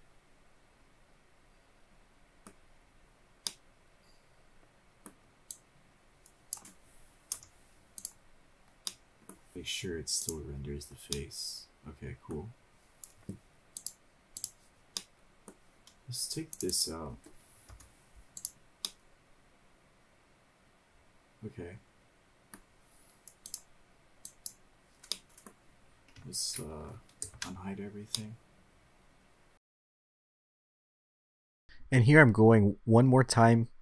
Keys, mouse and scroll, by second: 4.3-5.9 middle drag, 6.3-7.3 drag, 8.1 Delete, 9.5-10.0 drag, 9.5 middle click, 9.5-9.9 scroll down 2, 9.5 KP_0, 11.0 click, 11.9-13.1 middle drag, 14.6-15.3 drag, 15.8 middle click, 17.3 click, 17.5 click, 18.5 Delete, 19.6-23.3 middle drag, 24.2-25.3 drag, 25.9-26.3 middle drag, 28.2 alt+h, 28.9-32.0 middle drag, 32.0 click, 32.0 scroll up 1.